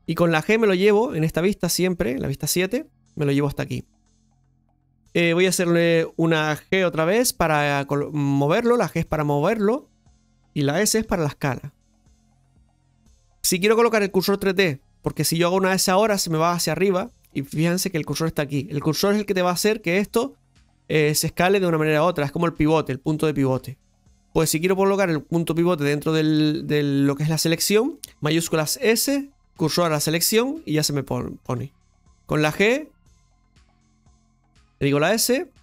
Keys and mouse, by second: 12.9 s, 28.1 ctrl+shift+a, 28.6 shift+s, 33.2 g, 33.9 ctrl+z.